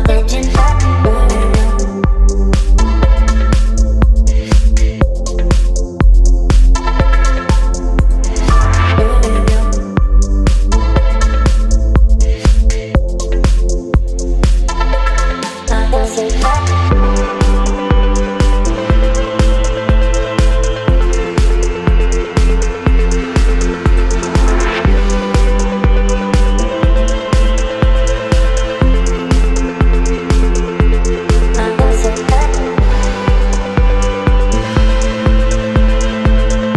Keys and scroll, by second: 1.4 space, 3.9 space, 7.6 space, 9.8 space, 10.5 v, 11.1 space, 20.9 b, 24.6 ], 28.0 ], 29.8 ], 35.6 x.